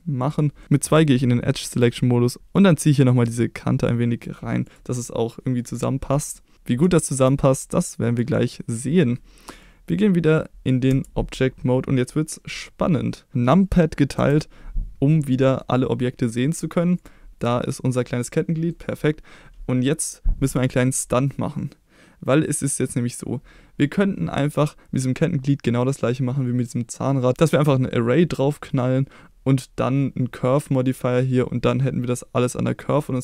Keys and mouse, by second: 0.2 click, 0.6 middle click, 0.9 2, 5.0 middle click, 6.9 shift+middle click, 10.9 Tab, 14.2 KP_Divide, 15.2-15.6 middle drag, 16.3-16.7 middle drag, 17.0 click, 17.7-18.7 middle drag.